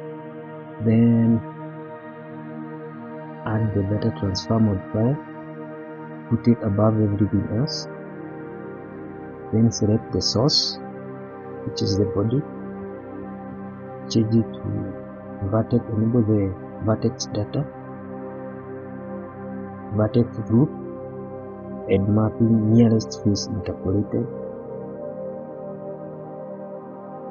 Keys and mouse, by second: 1.3-3.8 drag, 5.4-6.6 drag, 7.6 click, 9.4 click, 11.4-11.9 shift+middle drag, 13.8 click, 17.9 click, 19.9 click, 21.2-23.7 drag, 27.0-27.3 drag.